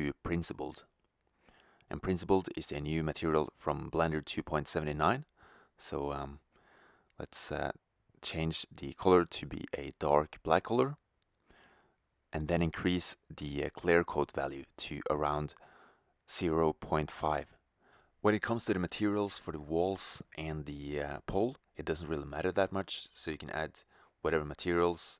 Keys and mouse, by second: 6.8-8.6 drag, 17.9 click, 20.2-21.9 drag, 24.5 shift+z.